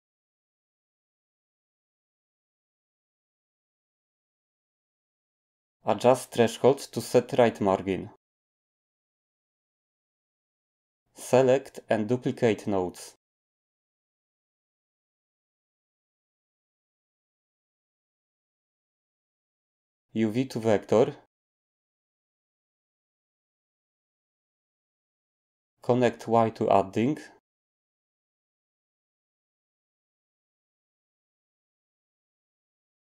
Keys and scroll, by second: 0.0-0.8 typing, 2.5-3.2 typing, 14.8-15.5 typing.